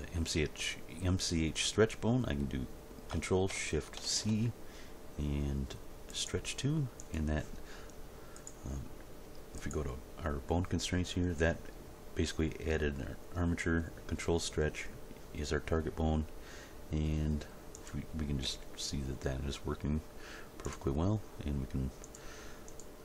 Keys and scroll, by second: 4.0 ctrl+shift+c, 18.5 g.